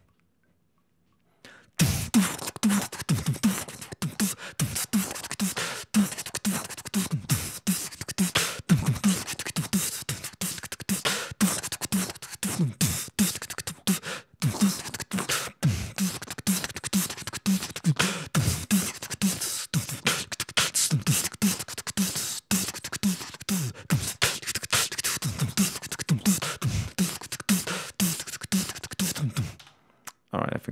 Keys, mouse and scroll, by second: 29.5 space.